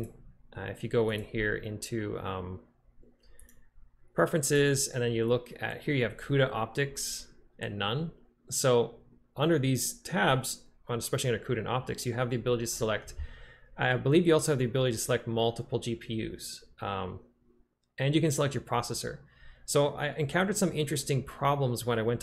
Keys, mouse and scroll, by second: 1.3-5.9 drag.